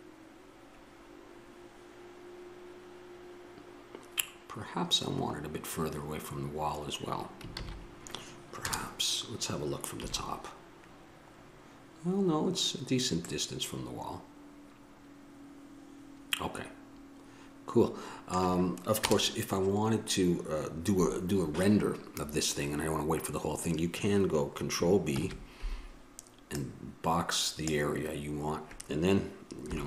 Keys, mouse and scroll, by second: 6.0-8.0 middle drag, 8.2 shift+z, 8.8 KP_0, 10.2 KP_7, 14.1 click, 14.3-15.6 middle drag, 19.2 KP_0, 25.3 ctrl+b.